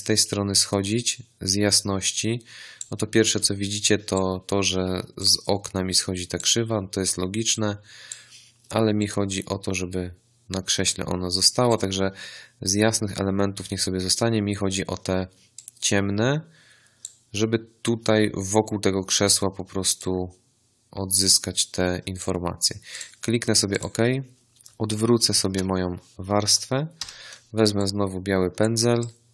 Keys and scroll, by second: 25.4 ctrl+i, 26.9 b.